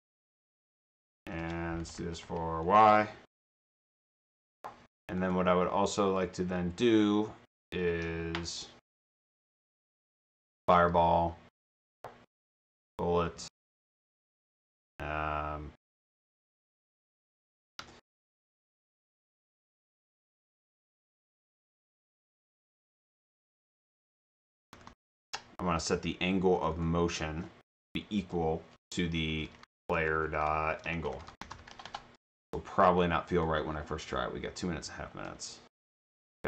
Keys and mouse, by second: 0.3 Home, 0.6 ctrl+c, 0.8 Tab, 3.0 BackSpace, 3.6 shift+t, 4.6 Return, 9.4 click, 10.5 click, 10.7 click, 12.1-13.3 typing, 19.8 click, 20.7 click, 20.9 click, 23.5 click, 24.3-25.6 typing, 26.6 click, 26.8 click, 29.0-32.1 typing, 33.4 click.